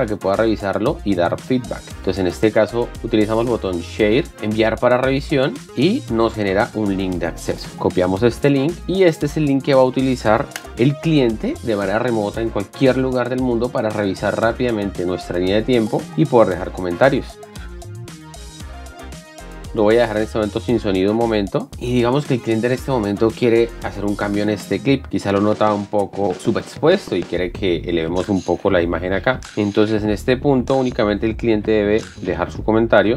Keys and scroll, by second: 10.3 ctrl+v, 10.7 Return, 29.4 BackSpace.